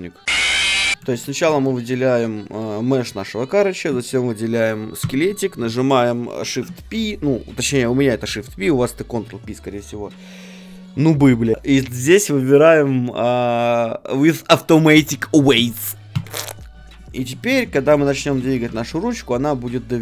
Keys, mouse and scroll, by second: 0.2 click, 0.2 g, 0.2 r, 0.9 ctrl+z, 1.1 a, 1.8 click, 2.4-3.7 middle drag, 2.4-3.8 right drag, 5.0-7.7 right drag, 6.4 shift+p, 17.4-20.0 right drag, 17.7 ctrl+Tab, 18.6 r.